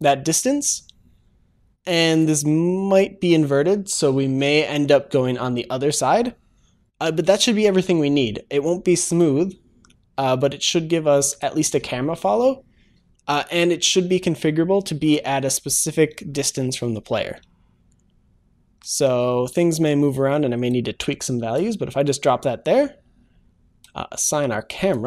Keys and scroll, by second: 2.2 ctrl+shift+s.